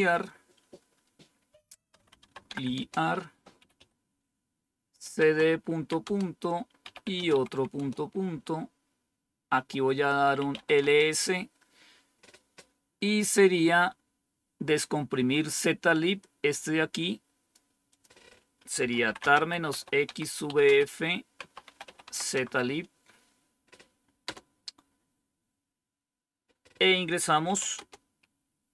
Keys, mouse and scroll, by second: 0.0-0.4 typing, 1.6-4.0 typing, 5.2-7.7 typing, 8.9 typing, 10.3-10.7 typing, 16.1-17.5 drag, 17.8 click, 18.5-22.5 typing, 24.2 Return, 27.3-28.7 typing.